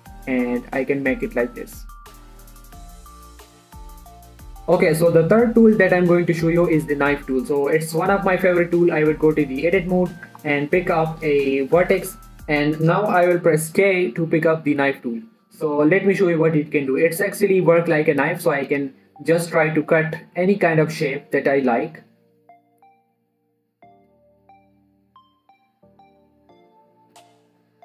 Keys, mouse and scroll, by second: 1.6 click, 1.8 Tab, 2.1-4.1 middle drag, 4.1 1, 7.4 Tab, 9.6 click, 10.9 scroll up 1, 12.8 shift+middle click, 15.7 k, 19.2 click.